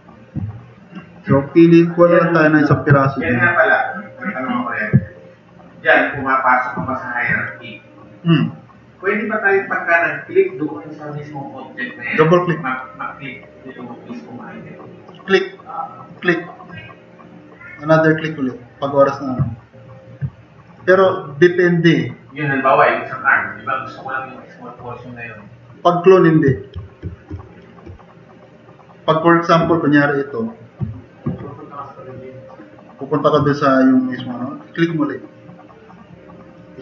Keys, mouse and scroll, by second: 2.9 alt+s, 25.3 click, 31.3 alt+s, 36.6 drag.